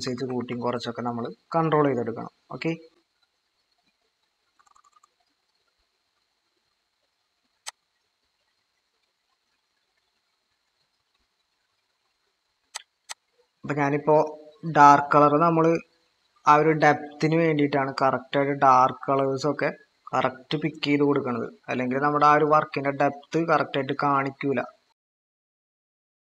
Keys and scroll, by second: 0.2 typing, 4.5-5.3 typing.